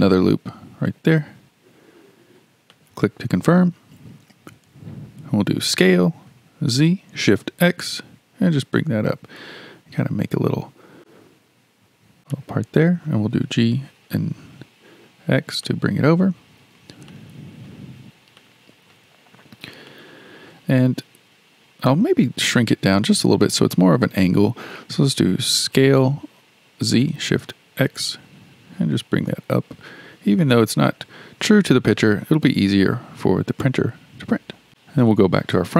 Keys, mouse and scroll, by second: 0.1 ctrl+r, 5.6 s, 13.2 g, 16.7-17.1 scroll up 2, 17.1-19.4 shift+middle drag, 19.4-19.9 scroll up 2, 19.9-22.9 shift+middle drag, 25.6 s, 34.0-34.7 scroll down 1, 34.7-35.1 scroll down 3, 35.1 KP_1.